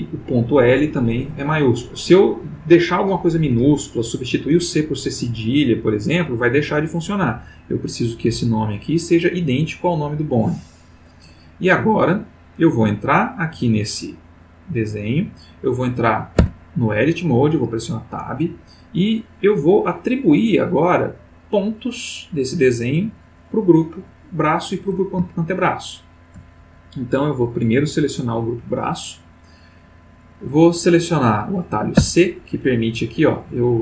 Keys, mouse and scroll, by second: 8.4 click, 8.8 click, 10.3 click, 12.3 click, 16.3 Tab, 19.1 middle click, 19.7 middle click, 25.5-26.5 shift+middle drag, 27.5 click, 32.0 c.